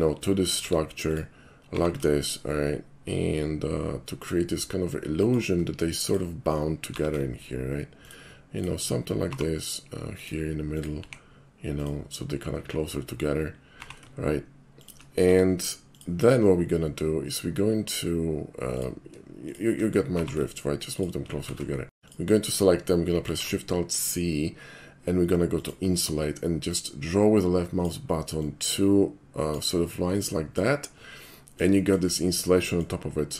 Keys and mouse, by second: 0.6 r, 1.1 click, 1.7 g, 5.2 shift+click, 6.0 shift+click, 6.9 g, 8.1 shift+click, 8.5 shift+click, 9.3 g, 10.2 click, 10.7 click, 11.8 click, 13.8 g, 14.8 shift+click, 15.3 r, 16.0 click, 16.5 middle click, 18.7 click, 19.5 shift+click, 20.2 g, 21.5 ctrl+z, 21.8 middle click, 23.3 alt+shift+c, 25.6 click, 26.7-27.8 drag, 28.4-29.5 drag, 30.2-30.6 middle drag, 31.3-31.6 middle drag, 31.8 shift+middle drag, 32.2 shift+middle click, 32.6 shift+middle click.